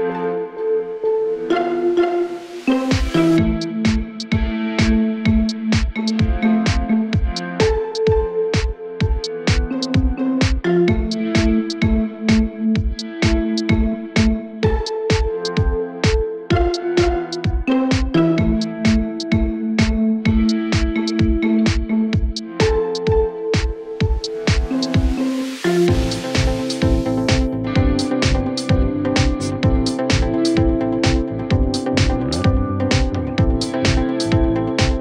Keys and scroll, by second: 4.5 shift+Page_Up, 10.4 Escape, 11.0 Delete, 16.2 ctrl+z, 20.9 ctrl+z, 25.5 Escape, 28.0 Delete, 29.9 shift+Page_Up, 32.3 Escape, 34.6 Delete.